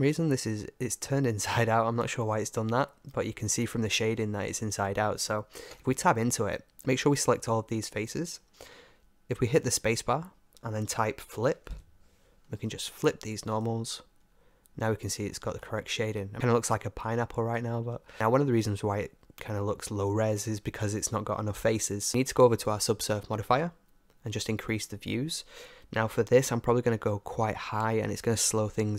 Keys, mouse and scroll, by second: 0.0 Tab, 0.0-3.0 middle drag, 3.0 Tab, 5.7 Tab, 6.7 a, 7.0 a, 9.2 space, 14.3 Tab, 15.3-16.3 middle drag, 18.6-20.5 middle drag, 20.5 scroll up 1, 24.7-26.5 drag.